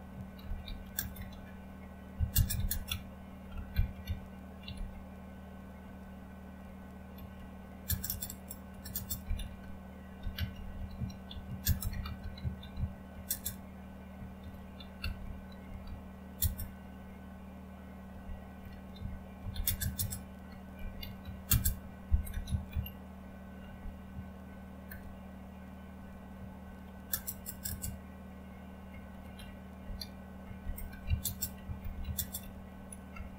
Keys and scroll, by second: 0.0-4.7 typing, 0.1 Caps_Lock, 5.8 typing, 7.1-13.2 typing, 14.4-16.9 typing, 17.9-27.6 typing, 29.3-33.3 typing.